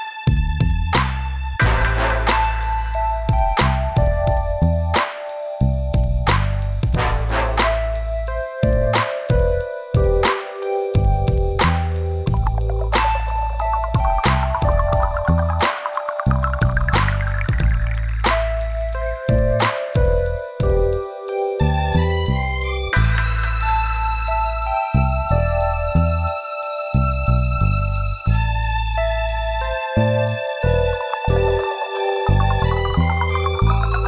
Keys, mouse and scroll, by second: 3.5 shift+t, 3.6 shift+f, 4.1 scroll down 2, 4.9 scroll up 2, 7.3 click, 7.4 click, 9.2 click, 11.5 click, 14.2 click, 14.3 click, 14.9 scroll up 1, 16.2 click, 19.1 click, 21.2 click, 23.3 click, 27.9 click, 29.0 click, 31.1 click.